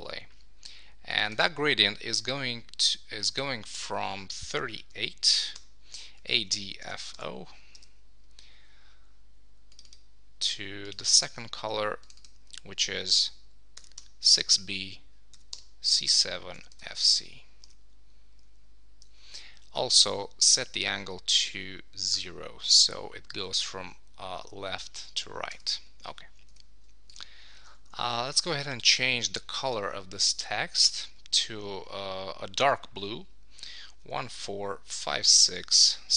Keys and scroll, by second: 7.7 Return, 17.1 Return, 17.8 Return, 25.5 Return, 28.3 shift+Left.